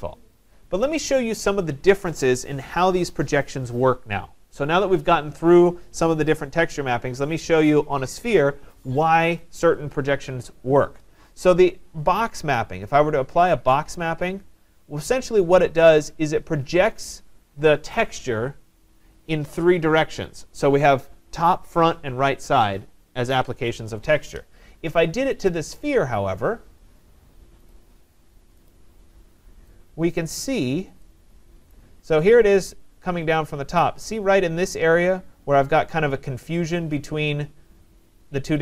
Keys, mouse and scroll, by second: 1.0 right click, 6.1 right click, 16.0-21.0 drag, 25.5 click, 27.7 click, 28.7 click, 30.2 right click, 30.7 middle click, 31.7 right click, 33.8 right click.